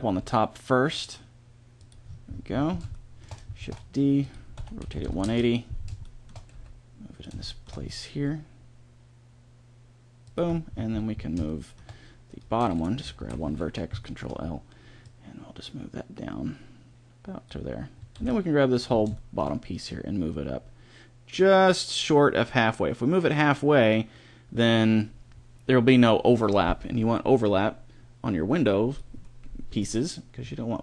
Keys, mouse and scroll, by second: 3.5 shift+d, 4.4 r, 6.3 g, 8.0 g, 10.3 click, 13.1 ctrl+l, 17.8 a, 18.0 b, 19.7-21.5 drag, 29.1-30.4 middle drag.